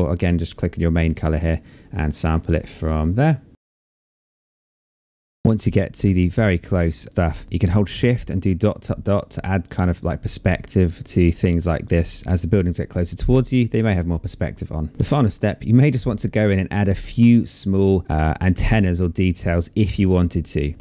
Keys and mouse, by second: 0.7 click, 2.5 click, 3.6 click, 4.5 shift+click, 5.0 click, 5.7 click, 5.9 shift+click, 6.5 click, 7.1 click, 9.5 click, 13.3 click, 14.0 click, 14.3 shift+click, 14.5 click, 18.3 click, 18.8 shift+click, 19.9 click.